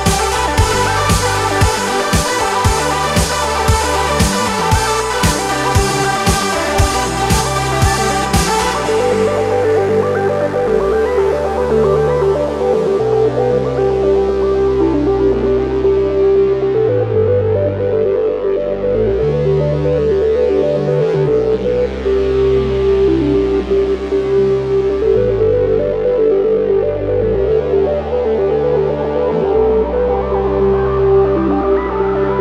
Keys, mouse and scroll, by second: 2.6 ctrl+d, 7.3 ctrl+d, 7.7 shift+click, 12.0 right click, 14.9 click, 17.6-21.7 drag, 26.1 right click, 28.9 click.